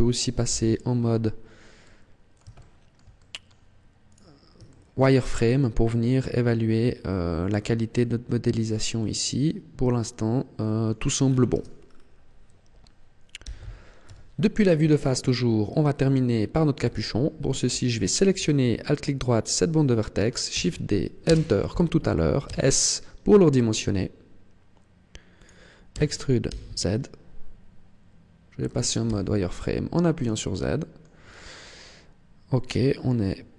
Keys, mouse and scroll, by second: 0.3 z, 0.8-1.7 scroll up 6, 1.6 middle click, 2.4 shift+middle click, 3.0 middle click, 3.9 right click, 4.5 middle click, 5.0 middle click, 11.0-11.3 scroll down 6, 11.3 Tab, 11.7 scroll down 1, 13.3 z, 13.9 KP_1, 14.7 shift+middle click, 15.5-15.9 scroll up 3, 16.3 scroll up 1, 16.7 Tab, 17.8 alt+right click, 20.3 shift+d, 22.4 s, 25.4 click, 25.7 e, 28.7 click, 28.9 z, 29.5 scroll up 2, 30.3 shift+middle click.